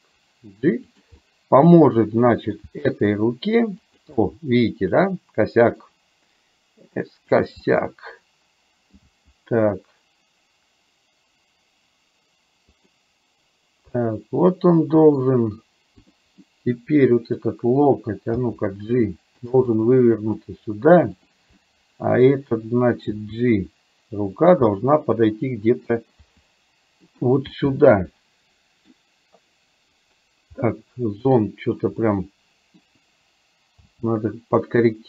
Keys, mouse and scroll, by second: 1.2-2.7 middle drag, 2.8 g, 4.2-5.8 middle drag, 7.7-8.9 middle drag, 9.1 g, 14.1-14.4 scroll up 1, 14.6 middle click, 16.2 click, 16.6 middle click, 18.3 g, 19.8 middle click, 21.3 click, 21.6 middle click, 23.3 g, 24.8-25.9 middle drag, 26.3 g, 27.6-29.1 middle drag, 32.1 middle click, 33.9 g.